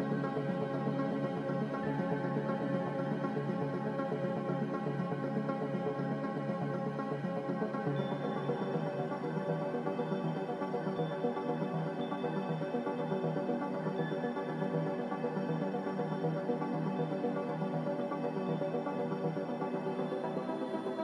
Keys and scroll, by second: 2.1 Return, 2.1 ., 2.1 1, 6.2 g, 8.0 Escape, 8.2 Escape, 14.3 Return, 14.3 z, 14.3 ., 14.3 5, 20.1 g.